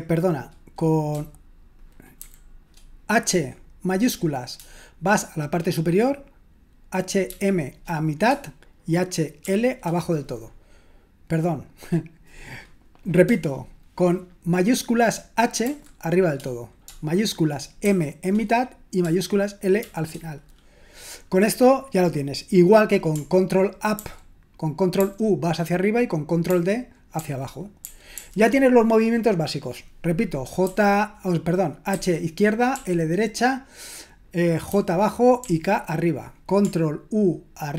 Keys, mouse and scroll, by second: 2.2 shift+h, 7.3 shift+m, 9.2-10.0 typing, 15.6 shift+h, 17.6-18.3 typing, 19.8 typing, 24.0 ctrl+u, 25.0 ctrl+u, 26.5 ctrl+d, 27.2 ctrl+d, 27.8 ctrl+u, 28.1 ctrl+u, 31.9-33.2 typing, 35.2-35.9 typing.